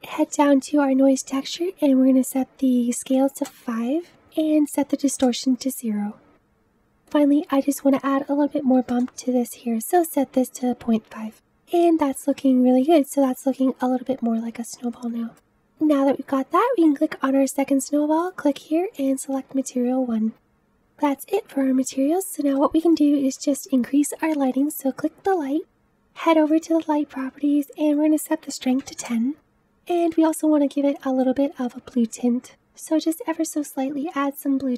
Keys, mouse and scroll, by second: 11.7-12.4 scroll up 2, 12.4-14.0 middle drag, 14.0-15.0 scroll down 3, 15.0 middle click, 15.4 scroll down 1, 16.6 click, 19.3-20.3 drag, 20.3-21.6 scroll up 1, 21.6-22.3 scroll down 3, 22.5-24.7 middle drag, 24.7 click, 29.0-31.2 drag.